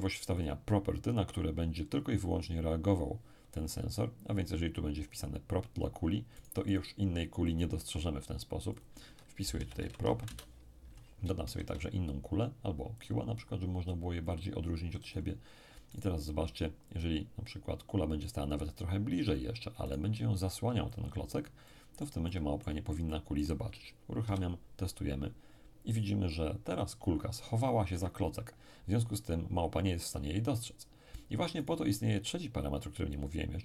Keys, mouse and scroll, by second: 0.4 click, 6.4-7.7 right drag, 7.8-9.8 right drag, 8.7 click, 9.5 p, 9.6 r, 9.8 o, 10.0 p, 10.2 Return, 11.4 shift+a, 13.0 click, 14.2-24.3 drag, 15.9-20.9 right drag, 21.6-24.3 middle drag, 24.2 p, 27.9 Escape, 31.6 right click.